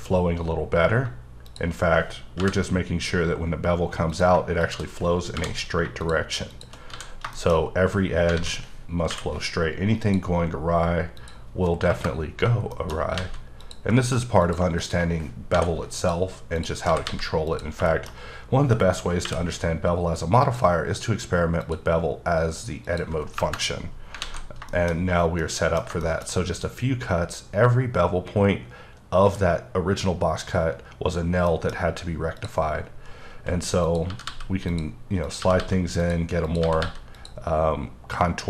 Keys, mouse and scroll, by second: 2.4 j, 4.1 click, 5.3 j, 6.0 shift+click, 6.5 shift+double click, 6.9 f, 7.3 shift+middle click, 8.3 alt+a, 9.1 k, 10.0 click, 11.1 click, 11.9 KP_Enter, 12.6-13.1 shift+scroll up 2, 12.7 shift+middle click, 13.1 a, 13.6 click, 14.4 click, 14.8 shift+click, 15.5 m, 15.9 click, 16.5 click, 16.8 g, 17.0 g, 17.5 click, 17.8 shift+middle click, 19.2 k, 20.4 click, 21.6 click, 22.8 click, 23.4 KP_Enter, 23.9 scroll down 3, 24.2 alt+a, 24.5 shift+scroll down 1, 24.7 shift+middle click, 26.0 double middle click, 31.5 double middle click, 31.7-32.2 scroll up 1, 32.4 click, 33.1-33.8 scroll up 2, 33.8 click, 34.0 g, 34.2 g, 34.6 click, 35.2 click, 35.4 g, 35.6 g, 36.0 click, 36.4 click, 36.6 g, 36.8 g, 37.1 click.